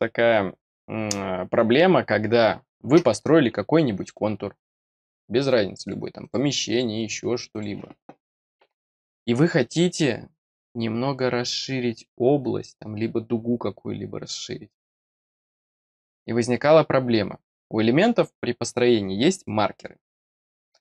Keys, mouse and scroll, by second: 4.0 click, 4.5 click, 4.9 click, 5.4 click, 5.8 click, 6.2 click, 6.6 click, 7.5 click, 15.9 click.